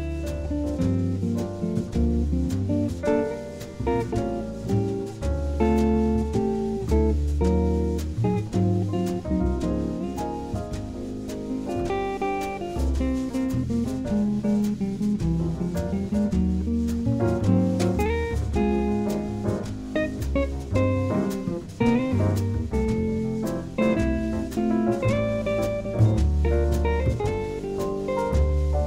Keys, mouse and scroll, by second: 0.2-2.0 drag, 2.2-4.0 drag, 5.2-6.9 right drag, 5.8-7.6 drag, 7.9 ctrl+z, 9.0 g, 12.2 g, 14.7-16.5 drag, 16.4 middle click, 17.1-18.8 right drag, 17.9 KP_3, 18.6-21.7 middle drag, 19.3 KP_5, 21.1 g, 22.5 KP_0, 24.0 g, 25.9 middle click, 26.9-28.2 middle drag, 28.2 right click.